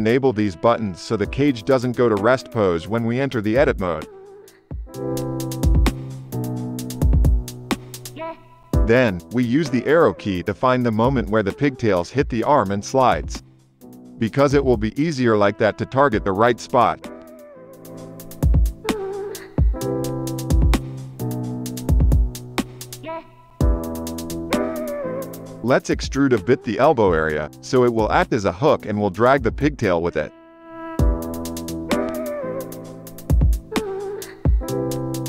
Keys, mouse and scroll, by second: 0.7 click, 1.1 drag, 5.2 shift+Left, 6.5 click, 7.4 KP_0, 7.5 KP_0, 8.7 KP_Divide, 10.7 space, 11.5 space, 11.9 Right, 12.1 Right, 12.4 Right, 12.9 Right, 13.3 Right, 13.4 Right, 13.6-14.4 Right, 14.9 Right, 15.0 Right, 15.2 Right, 15.5 Right, 15.7 Right, 16.1 Right, 16.3 Right, 16.5 Right, 16.7 Right, 16.9 Right, 17.2 Right, 17.4 Right, 17.5 Right, 17.7 Right, 17.9 Right, 18.2 Right, 18.7 Right, 19.6 Right, 24.1 click, 25.7 click, 30.8 KP_Divide, 32.9 ctrl+e, 34.3 ctrl+r.